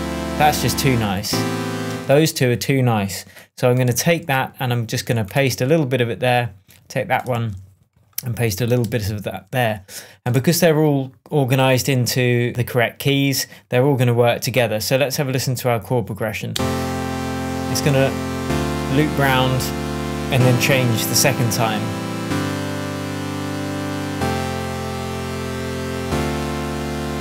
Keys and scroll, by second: 0.8 space, 3.9 super+c, 5.4 super+v, 7.2 super+c, 8.7 super+v, 10.2 BackSpace, 16.4 space, 21.3 super+j.